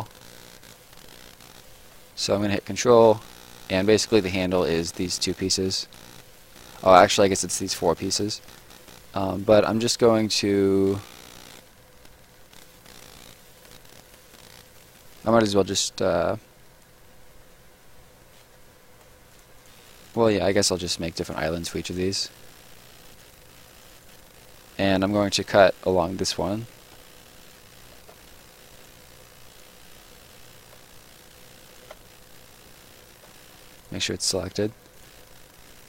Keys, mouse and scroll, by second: 0.9 right click, 2.5 ctrl+right click, 3.2 middle click, 5.5 scroll down 1, 5.9 middle click, 8.2 scroll up 1, 9.4 middle click, 9.7 right click, 10.7 click, 12.5 scroll down 1, 12.7 right click, 15.2 click, 15.6 scroll down 1, 19.3 click, 25.9 ctrl+click, 26.9 ctrl+shift+click, 28.7 click, 28.9 shift+click, 30.7 ctrl+shift+click, 33.5 Escape, 33.7 click.